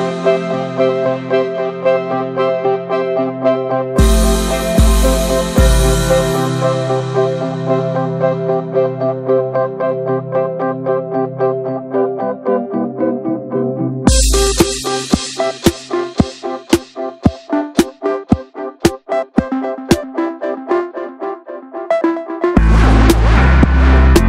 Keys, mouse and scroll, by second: 0.2-1.2 drag, 1.2 e, 1.7 click, 2.3 r, 3.1-4.7 drag, 4.7 e, 5.4-5.9 scroll down 13, 5.9 shift+middle click, 6.0-6.8 scroll up 10, 6.3 shift+middle click, 6.8 ctrl+z, 7.9-8.2 middle drag, 8.2 scroll up 1, 8.3 ctrl+z, 8.8 shift+middle click, 8.9-9.4 scroll up 4, 9.4 l, 9.6 middle click, 9.9 alt+s, 10.5 middle click, 10.7 alt+s, 11.6 click, 12.2 Tab, 12.4 ctrl+a, 12.9 click, 13.1 ctrl+a, 15.7 3, 15.8 click, 16.1 alt+middle click, 16.3 alt+z, 16.5 scroll down 1, 16.8 alt+z, 16.9 shift+middle click, 17.3 click, 17.8 r, 18.4 shift+middle click, 18.7 e, 19.1 click, 19.8 r, 20.3 scroll down 4, 20.5 shift+middle click, 20.6 scroll up 1, 20.9 shift+middle click, 21.1 alt+z, 21.3 middle click, 21.6 scroll down 2, 21.9 shift+middle drag, 22.0 shift+scroll up 1, 22.1 scroll down 1, 22.2 middle drag, 22.5-23.4 scroll up 4, 22.7 shift+middle click, 22.9 alt+z, 23.3 shift+middle click, 23.4-23.8 middle drag, 23.8 Tab, 23.9 click, 24.0 ctrl+a.